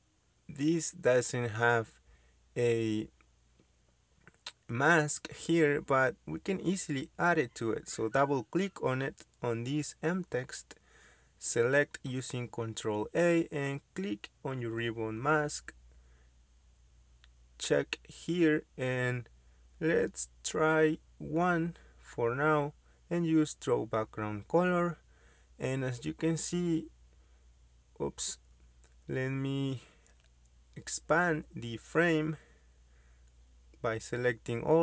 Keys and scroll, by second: 0.9 m, 1.0 space, 6.0 ctrl+z, 6.4 ctrl+z, 10.3 ctrl+a, 21.2 1, 29.5 typing, 34.0 ctrl+a.